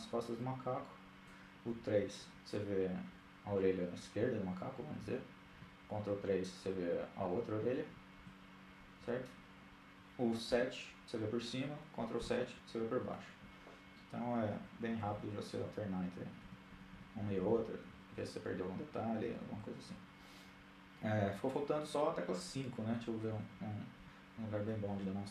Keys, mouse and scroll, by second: 0.7 KP_3, 4.3 ctrl+KP_3, 7.0 KP_3, 7.9 ctrl+KP_3, 9.3 KP_7, 11.1 ctrl+KP_7, 13.4-18.4 typing, 22.3 KP_3, 23.0 KP_1, 25.0 KP_8, 25.2 KP_8.